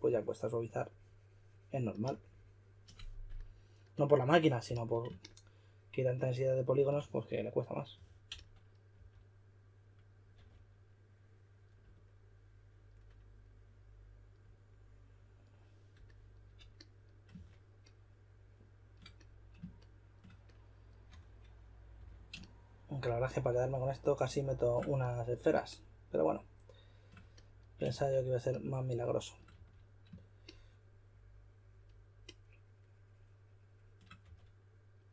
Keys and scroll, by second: 4.6 s, 7.9-8.9 typing, 10.3 typing, 17.3 shift+d, 21.1-21.9 typing, 27.9 shift+d, 29.5 d, 34.2 4.